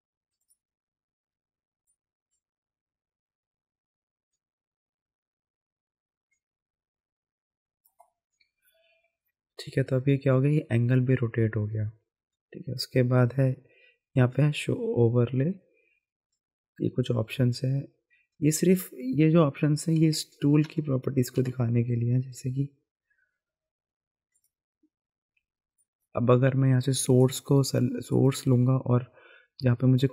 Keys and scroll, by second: 20.0 ctrl+z, 20.6 ctrl+z, 21.4 ctrl+z.